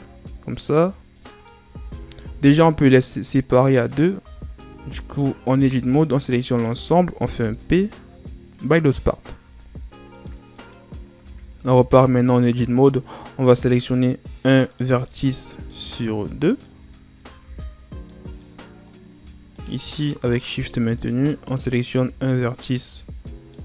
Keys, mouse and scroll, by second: 0.4 shift+right click, 0.9 scroll up 1, 1.1 middle click, 1.7 ctrl+z, 2.1 Tab, 2.5-2.8 scroll down 2, 2.8 right click, 3.7 middle click, 4.1 Tab, 4.4 scroll up 1, 4.7 a, 5.6 a, 7.3 p, 9.4 Tab, 10.0 right click, 10.5 right click, 11.1 Tab, 11.5 a, 13.0 right click, 14.6 shift+right click, 14.9-16.4 middle drag, 16.4 shift+right click, 17.3 ctrl+z, 18.0-19.4 middle drag, 19.4 shift+right click, 19.9 middle click, 20.9 shift+right click, 21.2-22.5 middle drag, 22.5 shift+right click, 22.9-23.6 middle drag.